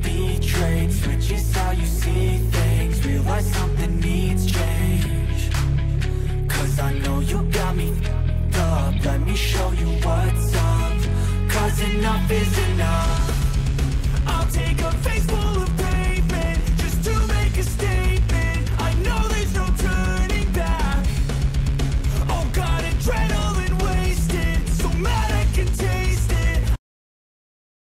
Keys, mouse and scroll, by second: 8.4 middle click, 12.6-14.4 middle drag, 16.3-18.5 drag, 18.7 middle click, 18.9-19.4 middle drag, 20.7 click.